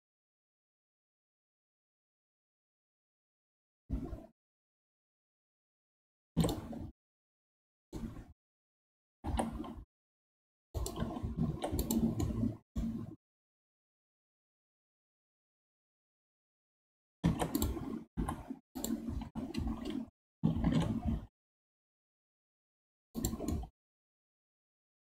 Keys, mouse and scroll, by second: 6.7 scroll down 1, 7.0-9.1 middle drag, 9.1 g, 11.5 ctrl+Tab, 12.2-16.8 middle drag, 17.2 ctrl+Tab, 18.1 3, 18.7 click, 19.2 l, 20.7 shift+d, 23.5-25.1 middle drag.